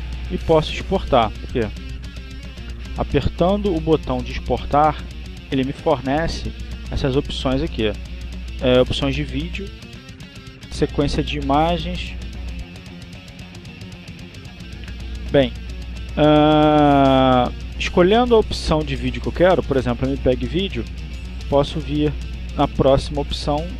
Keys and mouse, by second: 4.6 click, 5.6 click, 10.7 click, 12.8 click, 14.2 click, 15.9 click, 19.2 click, 20.7 click.